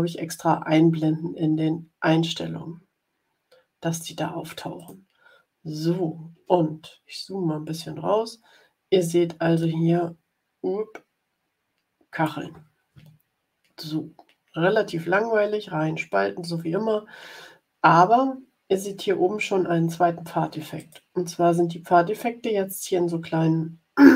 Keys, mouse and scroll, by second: 4.7 click, 6.5-7.3 ctrl+scroll down 6, 9.5-12.3 drag, 20.7 click.